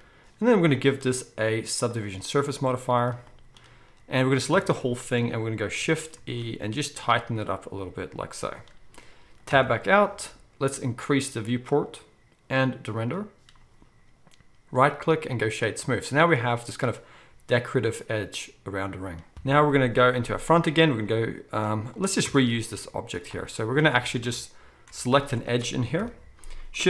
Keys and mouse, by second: 0.7-6.1 middle drag, 4.5 a, 6.2 shift+e, 8.5 right click, 9.2-11.8 drag, 9.5 Tab, 19.3 KP_1, 21.4-22.0 shift+middle drag, 22.0-24.2 right drag, 22.2 Tab, 23.9 alt+a, 24.2-26.8 shift+drag, 26.0 KP_1.